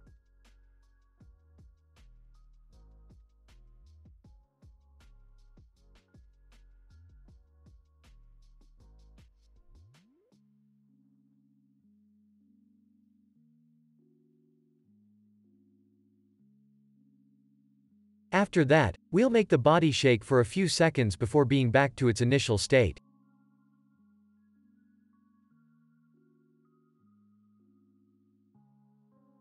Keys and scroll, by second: 1.4 space, 12.0 ctrl+s, 13.6 space, 15.3 s, 18.0 ctrl+s, 19.7 ctrl+c, 21.5 ctrl+v, 22.9 ctrl+v, 24.5 ctrl+v, 26.4 ctrl+v, 27.4 ctrl+s, 28.7 ctrl+v, 29.1 ctrl+s.